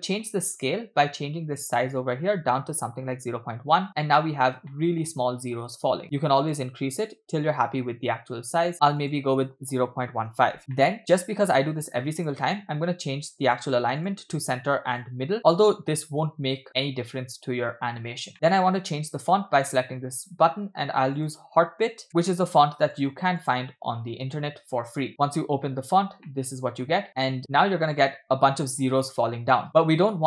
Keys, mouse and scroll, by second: 0.3-0.7 scroll up 2, 1.6-3.3 drag, 3.9-4.3 scroll up 3, 4.7-5.7 shift+middle drag, 6.0-7.7 drag, 8.7-10.6 drag, 10.7 middle click, 11.3-11.8 scroll up 1, 12.2-13.7 drag, 14.0-15.1 drag, 18.2-18.5 scroll down 2, 18.3-18.8 scroll up 5, 18.5 middle click, 19.8 click, 26.3 middle click, 27.0 scroll up 1, 27.1 scroll down 7, 27.2-27.6 scroll up 2, 27.4 space, 30.0 space.